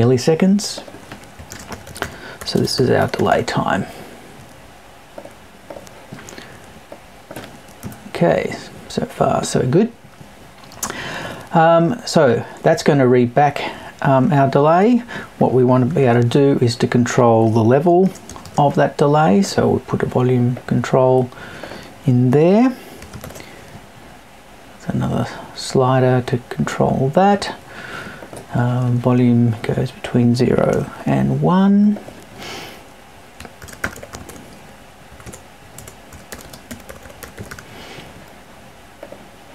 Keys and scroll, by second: 7.8 Right, 35.1 BackSpace.